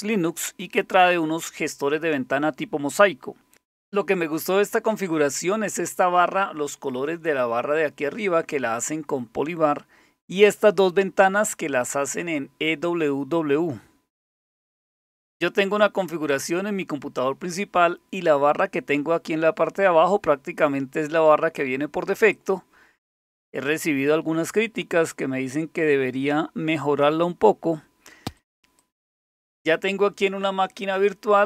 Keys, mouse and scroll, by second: 14.3 click, 15.6 click, 16.0 click, 22.3 click, 23.1 click, 28.4 click, 28.8 click.